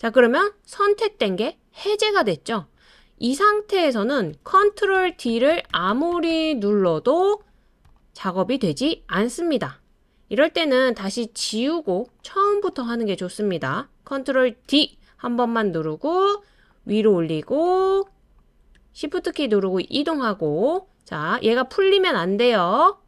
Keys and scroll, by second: 4.3 super+d, 4.6 super+d, 4.9 super+d, 5.3 super+d, 5.5 super+d, 5.7 super+d, 11.1 BackSpace, 14.6 super+d.